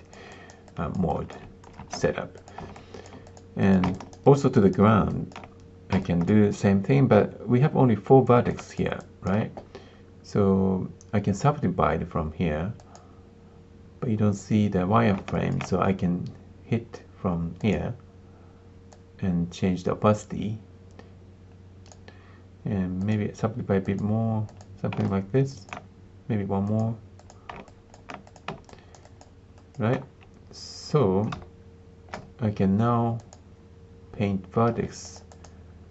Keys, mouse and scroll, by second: 0.3 alt+click, 0.6 alt+click, 1.0 alt+click, 1.7 ctrl+space, 2.3 click, 2.7 alt+click, 3.2 click, 3.6 click, 3.9 alt+click, 4.2 alt+click, 4.5 alt+click, 5.1 alt+click, 6.0 alt+click, 8.5 alt+click, 8.9 alt+click, 12.7 click, 15.3 alt+click, 17.5 click, 19.0-21.9 drag, 23.1 click, 24.5 click, 25.0 alt+click, 26.7 click, 27.1 click, 27.6 alt+click, 28.2 click, 28.6 alt+click, 29.0 alt+click, 29.5 alt+click, 32.1 ctrl+space, 33.1 click, 34.7 f, 35.2-35.9 drag.